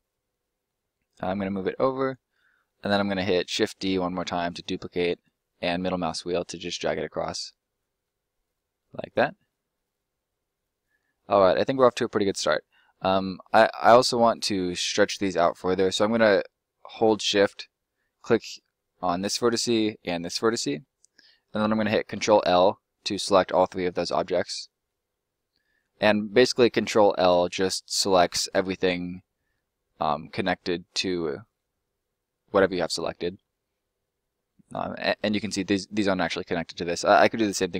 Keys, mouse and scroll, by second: 1.1 click, 2.2 middle click, 3.5 shift+d, 4.1 middle click, 5.0 click, 5.2 middle click, 6.6 click, 7.3 middle click, 9.4 scroll down 1, 9.7 middle click, 13.7 middle click, 18.0 shift+right click, 21.8 ctrl+right click, 22.1 ctrl+l, 23.0 middle click, 31.2 middle click, 34.8 click.